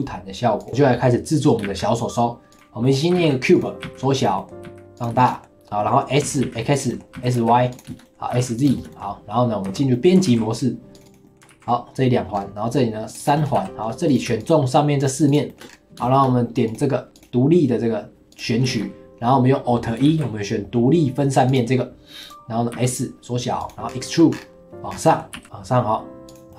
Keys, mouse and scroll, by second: 1.6 shift+a, 2.8 middle drag, 3.1 g, 3.8 s, 4.3 middle drag, 4.6 s, 5.1-6.2 shift+middle drag, 6.2 s, 6.9 middle click, 7.1 s, 7.9 shift+middle click, 8.3 s, 8.7-9.6 shift+middle drag, 9.6 Tab, 9.9 middle click, 10.2 ctrl+r, 11.2 middle click, 11.5 ctrl+r, 13.4 middle click, 13.5 3, 14.1 click, 14.4 shift+click, 15.0 shift+click, 15.3 shift+click, 15.5 shift+middle click, 15.7-16.0 scroll up 2, 16.0 shift+middle click, 16.7-18.7 drag, 18.7-20.1 shift+middle drag, 20.1 alt+e, 22.7 s, 23.9 scroll down 2, 24.0 middle click, 24.3-24.9 scroll up 5, 24.9 scroll down 4, 25.1 middle click, 25.3 e, 26.5 middle click.